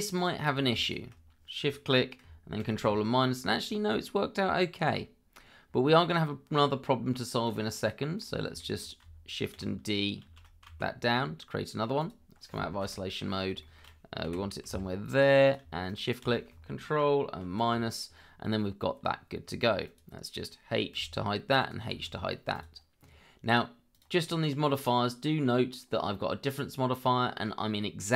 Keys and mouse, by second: 0.1 click, 0.4 click, 0.8 shift+click, 3.7-5.4 middle drag, 7.4 click, 8.1 click, 8.6 shift+middle drag, 10.2 shift+d, 10.6 z, 13.6 shift+middle drag, 14.3 g, 14.7 z, 15.8 shift+click, 17.4 ctrl+KP_Subtract, 19.8 click, 20.9 h, 21.6 click, 22.5 click, 23.9 click.